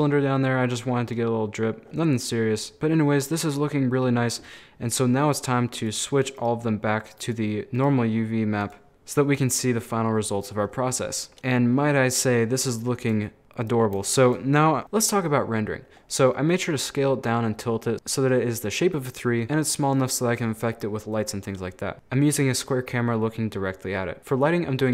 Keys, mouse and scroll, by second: 1.8 middle click, 1.9 scroll up 1, 2.0-3.7 middle drag, 3.7-5.8 scroll down 1, 5.8 click, 5.8 middle click, 6.4 right click, 7.2 click, 7.8 right click, 8.6 click, 8.9 middle click, 9.5 scroll down 3, 9.6-10.6 middle drag, 10.6 scroll up 3, 10.8 middle click, 11.5 scroll down 2, 11.6 middle click, 11.9 scroll up 5, 12.1-15.7 middle drag, 16.0-17.7 scroll down 6, 17.9-18.2 scroll up 2, 24.2 middle click, 24.2 scroll down 1, 24.3-24.9 middle drag.